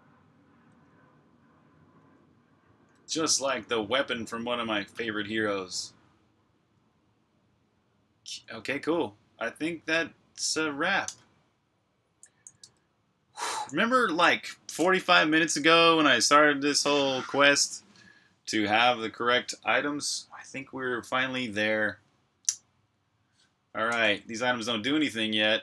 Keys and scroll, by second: 12.4 super+Tab, 15.1-16.8 typing, 23.9-25.6 typing.